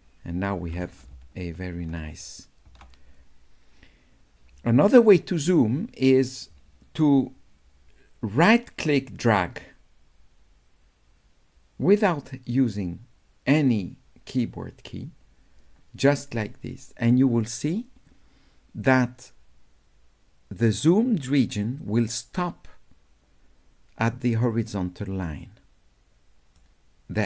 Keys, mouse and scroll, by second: 7.5 scroll up 2, 8.9-26.5 right drag.